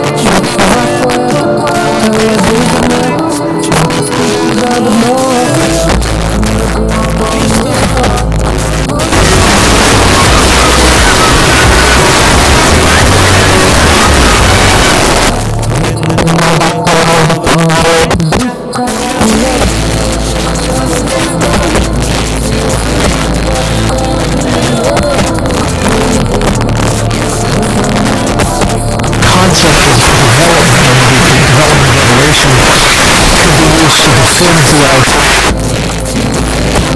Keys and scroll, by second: 9.0 typing, 14.9 Page_Down, 35.0 Page_Down.